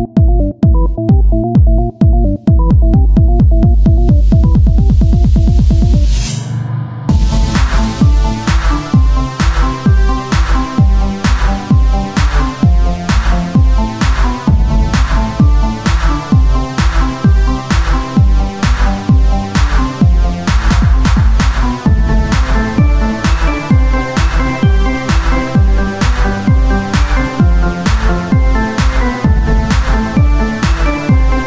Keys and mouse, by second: 0.0 r, 3.5-6.7 right drag, 6.7 z, 9.5 z, 10.0 Tab, 12.3 Tab, 16.4 o, 17.2-19.6 drag, 21.0-22.0 drag, 21.1 z, 21.4 c, 22.2 z, 24.4 Tab, 27.4 click, 27.8-29.0 right drag, 28.3-31.4 drag, 30.7 right click.